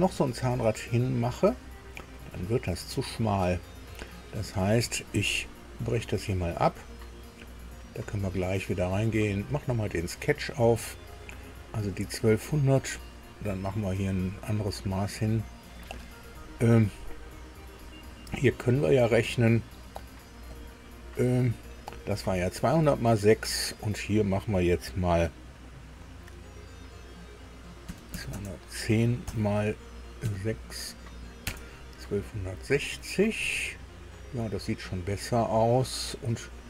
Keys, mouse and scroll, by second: 1.5-2.0 scroll down 2, 5.9 click, 6.7 scroll down 1, 7.4 scroll up 1, 9.3 click, 10.7-11.3 scroll up 2, 11.7 scroll up 1, 15.7 click, 20.5 click, 27.9 KP_2, 28.1 KP_1, 28.3 KP_0, 30.2 KP_6, 31.4 KP_Enter, 33.3 click.